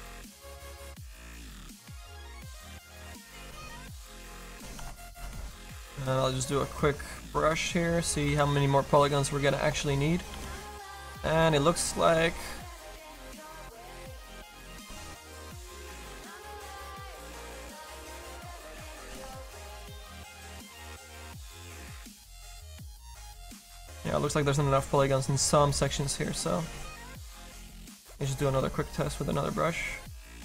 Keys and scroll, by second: 4.8 ctrl+d, 8.4 ctrl+z, 9.9 s, 10.4 s, 19.3 ctrl+z, 20.0 a, 21.1 ctrl+z, 22.8 ctrl+z, 28.7 s, 30.3 ctrl+z.